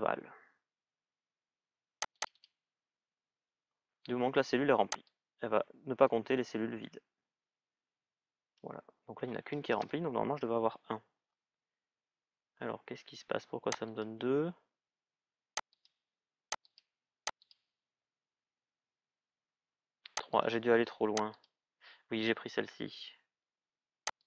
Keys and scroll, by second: 9.6 Return.